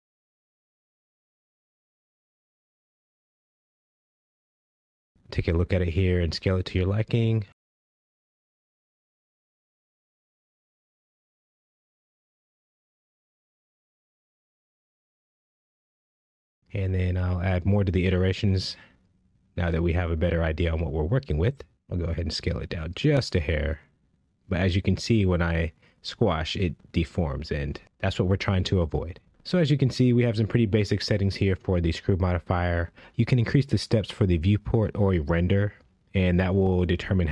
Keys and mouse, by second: 4.7-6.7 middle drag, 7.3 s, 8.1 click, 9.5 KP_1, 11.7 g, 12.2 z, 14.9 shift+middle drag, 15.6-16.0 shift+middle drag, 17.6 click, 18.3 click, 18.6 click, 19.3 click, 23.6 s, 23.9 z, 26.8 right click, 28.5 s, 31.9-32.6 middle drag, 32.9-35.5 middle drag, 36.1 KP_1, 36.1 KP_4, 37.1 KP_1.